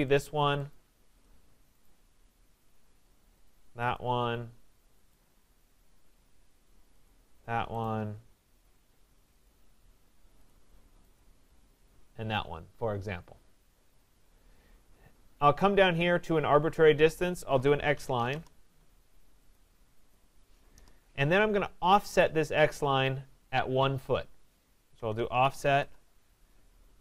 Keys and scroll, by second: 1.2 Return, 7.3 Return, 18.3 Return, 25.8 Return.